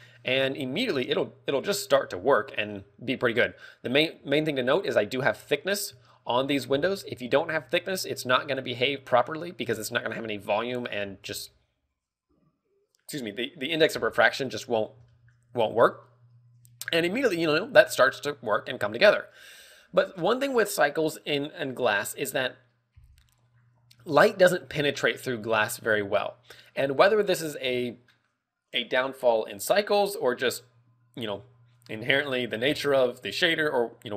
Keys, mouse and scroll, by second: 4.7 z, 5.8 KP_3, 6.5 shift+middle click, 6.9 scroll up 1, 7.5-7.8 scroll up 9, 8.0 scroll down 3, 8.3 middle click, 9.2 middle click, 10.2 scroll down 1, 10.8-11.7 scroll down 5, 11.7 KP_0, 11.9 KP_0, 15.2 scroll up 4, 15.5 shift+middle click, 15.6 shift+middle click.